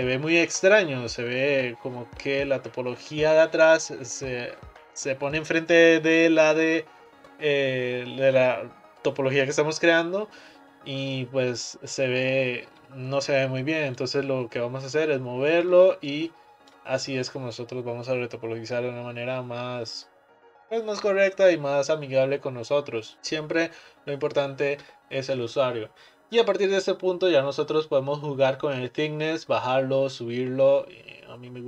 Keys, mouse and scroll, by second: 14.0 click, 15.7 click, 16.2 click, 25.5-28.5 middle drag, 28.9-31.6 drag.